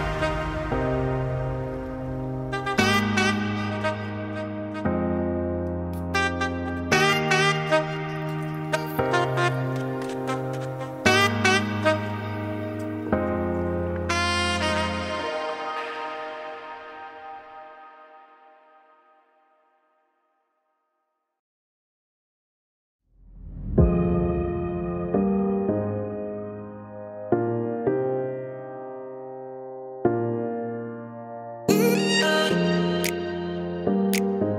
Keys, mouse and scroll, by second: 0.1 click, 2.9 click, 4.6 alt+a, 4.7 alt+scroll up 1, 4.8 scroll down 5, 5.1 shift+middle click, 5.4 alt+a, 5.5 shift+middle click, 5.8 scroll down 1, 6.0 middle click, 6.6 click, 7.3 shift+click, 7.8 click, 10.3 shift+click, 15.1 ctrl+j, 16.2 alt+a, 16.4 middle click, 16.8 click, 17.4 Tab, 18.5 middle click, 21.3 click, 22.2 click, 22.3 click, 26.1 alt+a, 26.5 middle click, 33.7 shift+middle click.